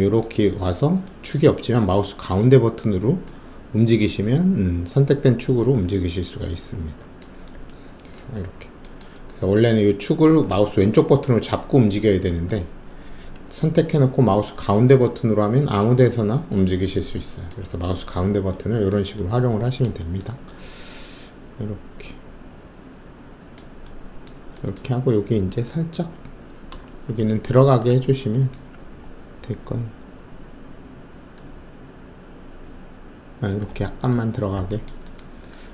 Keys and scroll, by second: 26.8 alt+shift+q, 28.7 alt+`.